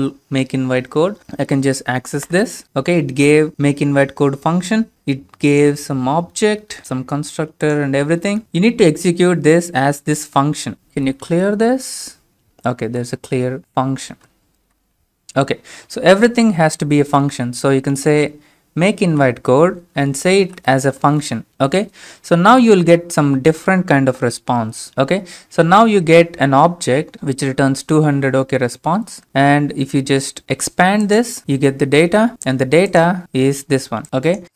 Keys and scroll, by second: 1.2 Tab, 2.4 Return, 10.8-11.9 typing, 12.9 Return, 14.0-14.8 typing, 18.0 typing, 19.1 Right, 20.5 typing.